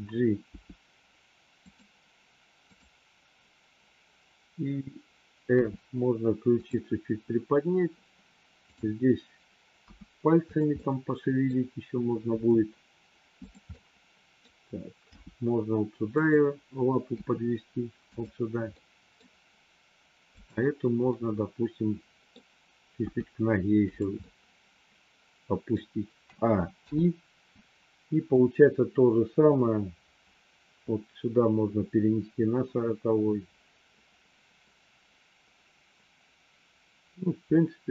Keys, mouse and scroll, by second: 0.4 g, 2.6 click, 5.5 r, 9.9 r, 10.6 middle click, 12.3 r, 13.6 middle click, 15.0 g, 17.1 r, 18.6 middle click, 21.1-22.3 middle drag, 23.0 g, 24.3-25.8 middle drag, 26.8 i, 28.3-37.9 drag.